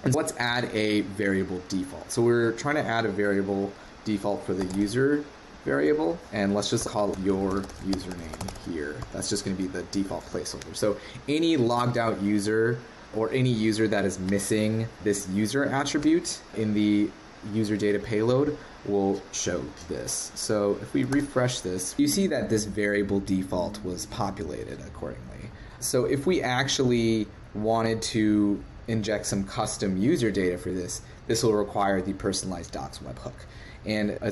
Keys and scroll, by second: 21.1 super+r.